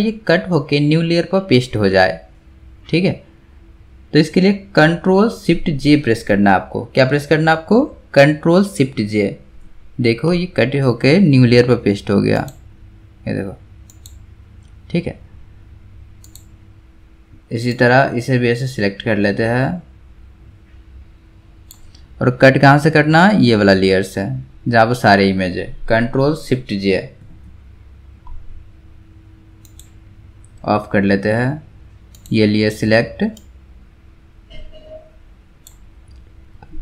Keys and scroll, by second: 8.9 ctrl+shift+j, 27.2 ctrl+shift+j.